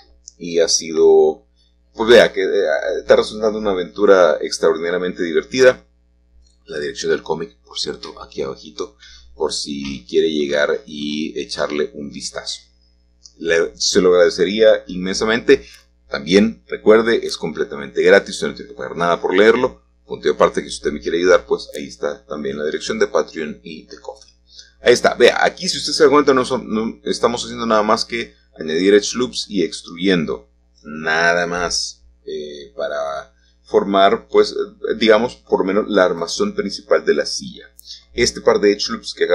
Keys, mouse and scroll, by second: 3.6 click, 5.2 a, 6.3-10.9 alt+shift+drag, 6.3-10.9 alt+shift+middle drag, 12.6-13.7 drag, 12.6-13.7 middle drag, 14.3 g, 16.9 click, 17.9 3, 19.1-20.8 drag, 20.8 typing, 20.9 click, 25.5 click, 29.1 click, 33.6-34.9 drag, 36.7-38.7 drag.